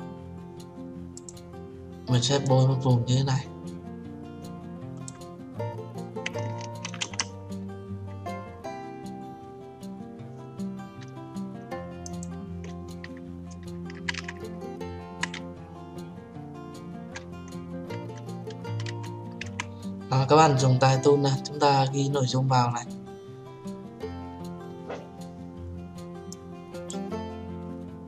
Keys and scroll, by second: 7.2 ctrl+v.